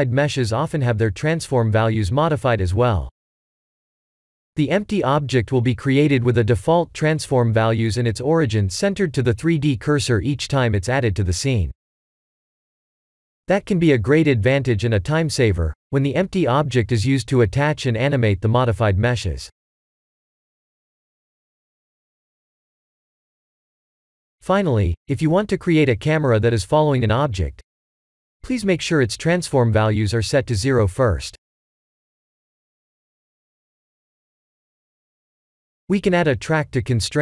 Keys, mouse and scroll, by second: 3.6 ctrl+z, 4.9 click, 7.5 click, 8.3 click, 11.6 shift+a, 16.0 click, 20.2 click, 21.5 click, 23.7 click, 25.3 click, 26.1 shift+a, 32.9-34.9 drag.